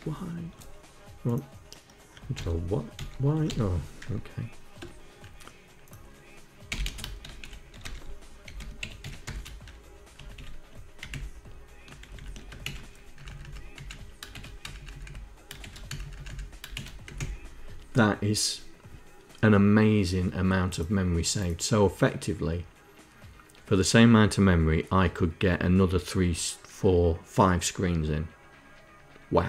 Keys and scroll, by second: 1.8 ctrl+y, 2.5 ctrl+y, 4.3 BackSpace, 5.9-9.2 typing, 9.6 Left, 9.8 Delete, 10.6 shift+Left, 11.5 shift+Left, 11.7 shift+Left, 12.1 ctrl+Insert, 12.6 Up, 13.2 Up, 13.8 shift+Insert, 14.1 Up, 14.4 Up, 14.6 Up, 15.1 shift+Insert, 15.3 Up, 15.5 Up, 15.8 Up, 16.2 shift+Insert, 16.5 Down, 16.6 Up.